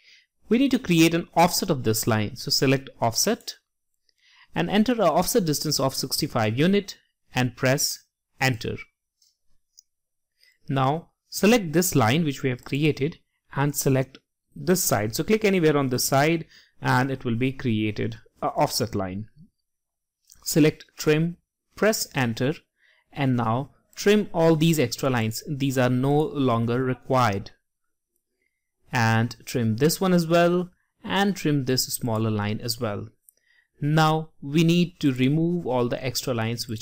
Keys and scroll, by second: 4.6-5.4 typing.